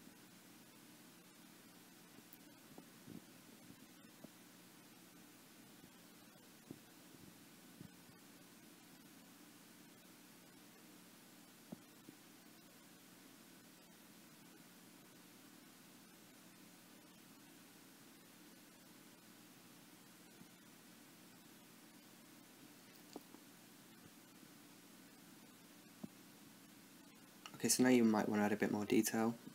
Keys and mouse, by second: 0.0 i, 0.8 Left, 1.8-4.3 drag, 2.0 i, 2.6 i, 4.6 Right, 4.8 Right, 5.0 Left, 5.9 i, 6.2 i, 6.7 Right, 7.5-9.0 drag, 8.2 i, 8.6 i, 9.0 middle click, 9.6 click, 10.1 space, 10.2 right click, 11.5 i, 12.0 i, 12.5 Left, 13.4-14.8 drag, 13.5 i, 14.0 i, 14.6-15.3 Right, 15.7 Left, 16.8 i, 17.2 i, 17.7 Right, 18.5 i, 19.0 i, 20.7 Left, 21.0 Right, 21.9-23.3 drag, 22.0 i, 22.4 i, 22.9 Left, 23.2 Right, 24.0-26.5 Left, 27.0 n, 27.4 shift+a, 27.9 t, 28.3 click, 29.1 middle click.